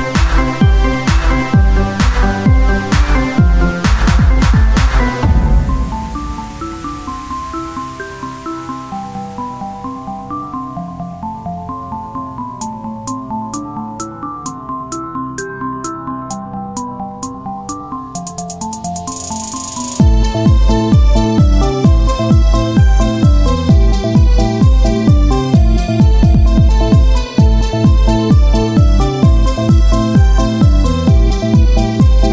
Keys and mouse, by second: 0.2-2.2 right drag, 3.4 Tab, 5.4-9.0 drag, 6.1 Tab, 9.0 ctrl+j, 11.2 click, 11.6-13.5 drag, 13.5-16.3 right drag, 16.3-20.5 drag, 26.6 click, 27.2 KP_1, 27.9 z, 28.6 Tab, 28.8 z, 30.0-32.1 drag, 32.1 Tab.